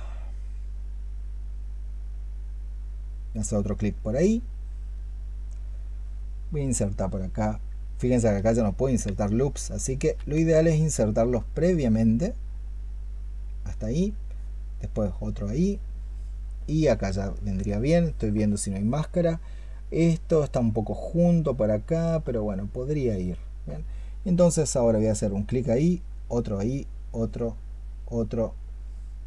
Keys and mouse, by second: 8.2 ctrl+z, 9.4 ctrl+z, 9.9 ctrl+z, 17.2 ctrl+click.